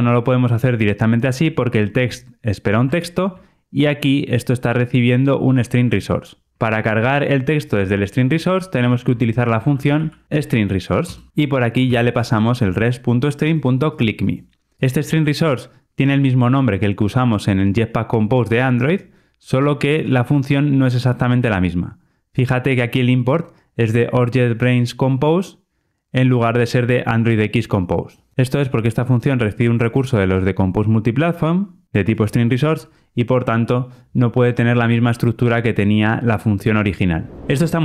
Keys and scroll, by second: 0.0 Return, 8.8 super+x, 11.7 Return.